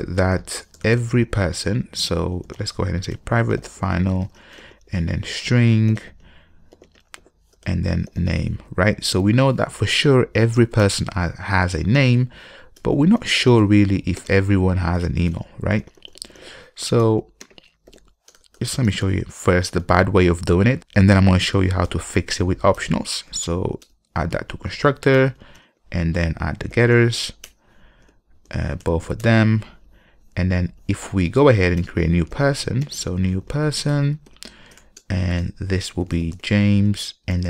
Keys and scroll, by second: 3.3 Return, 13.0 Return, 17.2 Return, 22.1 alt+Return, 25.8 ctrl+n, 34.1 Return.